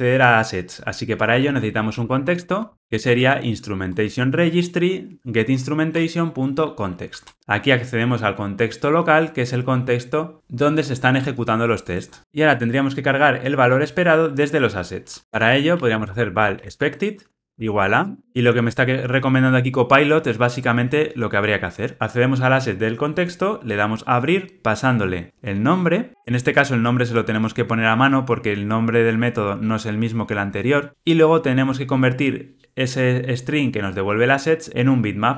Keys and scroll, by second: 4.0 Escape, 5.9 Tab, 7.2 alt+Return.